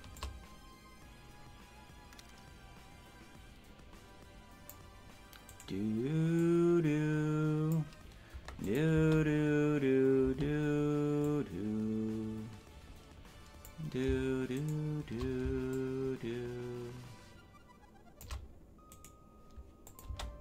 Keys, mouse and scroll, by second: 0.1-4.7 shift+drag, 5.5 right click, 6.3-7.7 drag, 8.6 click, 8.9 space, 10.2 space, 11.2-13.6 drag, 14.6 shift+right click, 15.7-18.2 shift+drag, 19.0 right click, 19.8 click, 20.0 space.